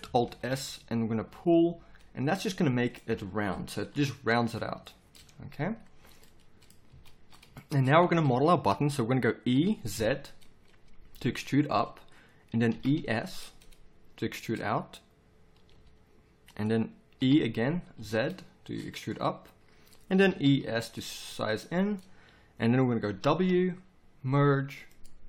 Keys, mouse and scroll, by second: 0.2 alt+shift+s, 3.9 KP_7, 6.9 z, 9.5 e, 12.7 e, 15.7 s, 17.2 e, 20.1 e, 23.2 w.